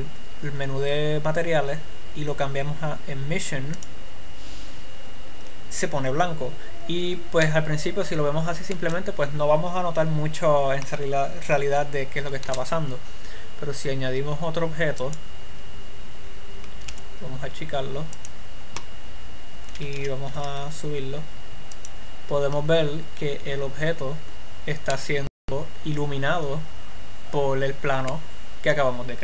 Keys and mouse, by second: 13.2 shift+a, 17.7 s, 19.3-20.8 drag, 20.8 g, 23.0-24.3 drag, 26.3-27.5 middle drag.